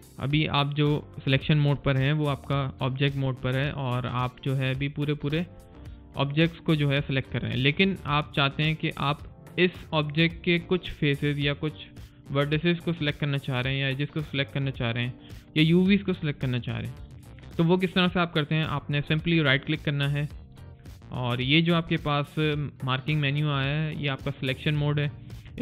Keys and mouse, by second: 0.1 click, 4.2 click, 19.3 right click.